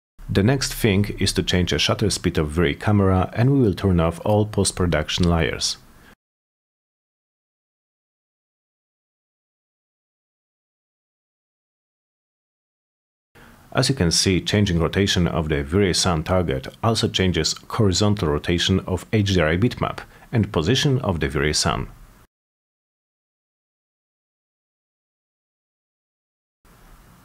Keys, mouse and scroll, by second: 2.8 click, 3.4 3, 3.7 Return, 5.9 click, 6.4 click, 7.1 click, 7.9-8.9 drag, 9.7 click, 10.9-27.2 drag.